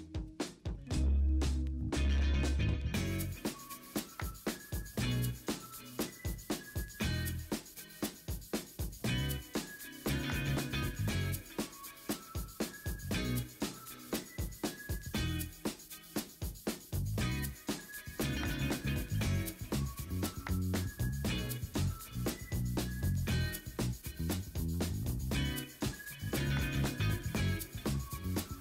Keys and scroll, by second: 1.0 b, 2.1 3, 3.6-5.0 typing, 12.5 v, 16.6 v, 17.2 ctrl+t, 17.7 Return, 18.1 b, 18.7 b, 19.0 ctrl+j, 19.1 ctrl+t, 19.3 Escape, 19.5 ctrl+u, 20.1 ctrl+t, 21.6 v, 22.5 Down, 22.8 Return, 23.7 Escape, 23.8 b, 25.3 d, 26.7 ctrl+z, 27.0 ctrl+f, 27.1 ctrl+f, 27.5 v.